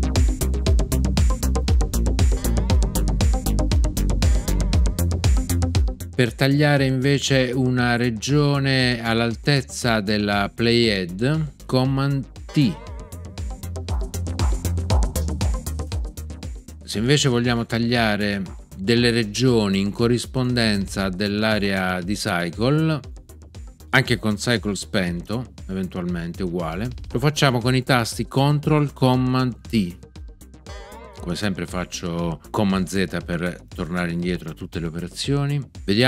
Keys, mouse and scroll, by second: 2.3 super+r, 12.4 super+t, 30.6 ctrl+super+t.